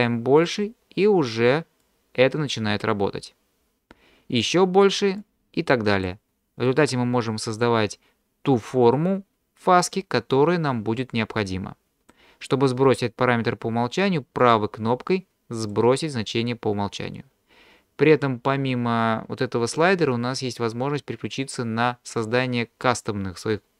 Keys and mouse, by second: 0.5 click, 1.9-4.5 drag, 5.3 click, 6.7-12.1 drag, 14.5 right click.